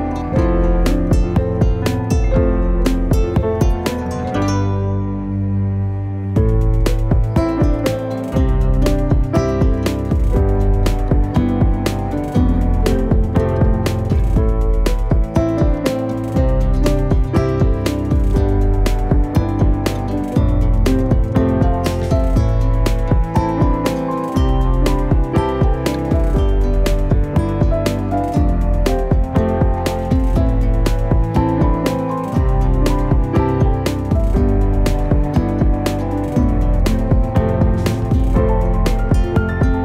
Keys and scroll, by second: 0.8 s, 4.2-5.5 typing, 18.8 F10, 25.7-26.9 typing, 27.0 Return, 29.8-31.0 typing.